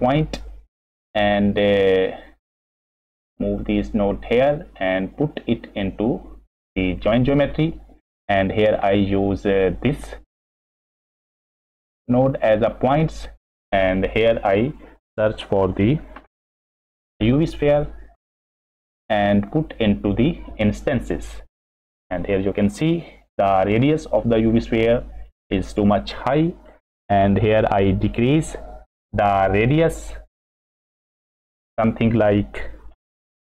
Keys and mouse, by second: 2.5 middle click, 3.1-3.6 drag, 4.0 click, 5.2 click, 5.4-6.5 drag, 7.2 middle click, 8.4 middle click, 10.0-12.7 drag, 13.2 middle click, 15.6 shift+a, 19.5-20.9 drag, 25.0 middle click, 32.9-33.5 shift+middle drag.